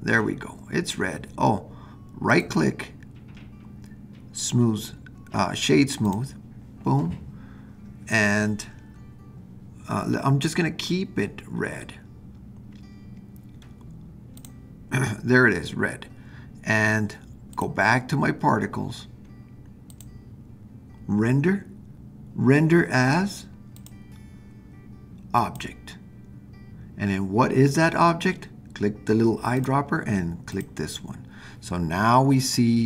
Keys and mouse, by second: 2.3-6.1 right drag, 17.5 click, 19.9 click, 23.9-25.6 drag, 29.6 click.